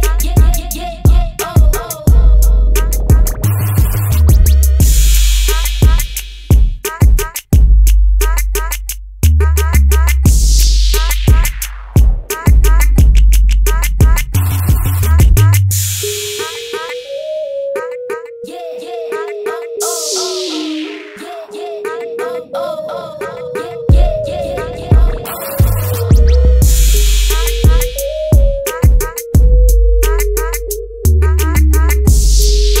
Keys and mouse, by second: 5.8 click, 6.7 click, 7.5 middle click, 8.3 right click, 8.6 Tab, 17.0-28.2 drag, 30.5 click.